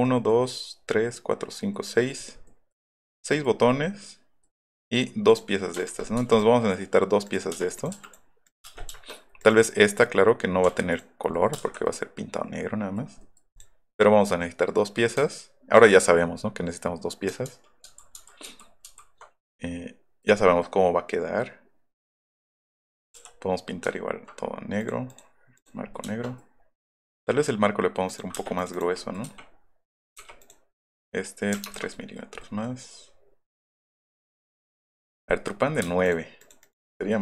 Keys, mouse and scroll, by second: 1.7 middle click, 2.4 middle click, 3.0-5.0 middle drag, 6.3 m, 7.3 click, 7.8 click, 7.9 m, 8.0 click, 9.1 middle click, 11.4 middle click, 11.6 Escape, 11.8 middle click, 13.4-14.0 middle drag, 14.2 middle click, 14.5 middle click, 14.8 middle drag, 17.5 ctrl+z, 17.9 ctrl+z, 18.2 ctrl+z, 18.5 ctrl+z, 18.9 ctrl+z, 19.5 middle click, 20.6 middle click, 22.0 middle click, 23.0 middle click, 24.8 click, 25.1 click, 28.3 space, 29.0 click, 30.4 click, 31.5 KP_3, 32.0 click, 32.2 scroll down 2, 32.4 click, 34.0 middle click, 34.9 click, 35.1 click, 35.3 middle click, 35.8 space, 36.0 click, 36.4 click, 36.6 click, 36.9 middle click.